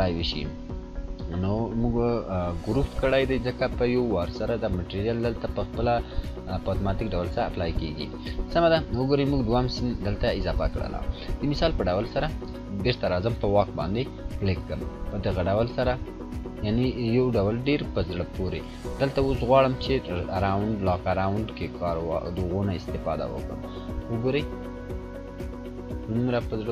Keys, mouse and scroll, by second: 1.5-3.1 scroll down 1, 3.2 click, 12.6 click, 12.6-24.5 drag, 14.7-19.6 drag, 24.5 scroll up 1, 25.8 click.